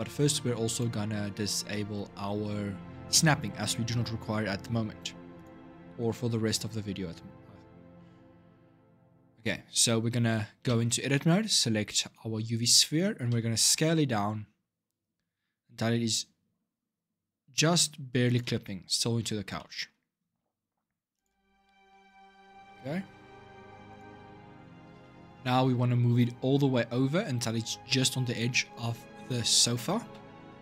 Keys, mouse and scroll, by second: 0.4 click, 2.8 click, 5.1 click, 10.4 Tab, 13.1 s, 18.8-19.3 scroll up 6, 19.3-20.9 shift+middle drag, 20.9 click, 22.4-23.7 middle drag, 23.7 click, 24.1-24.8 scroll down 6, 24.8 shift+middle click, 25.1-26.3 scroll up 3, 29.8 g.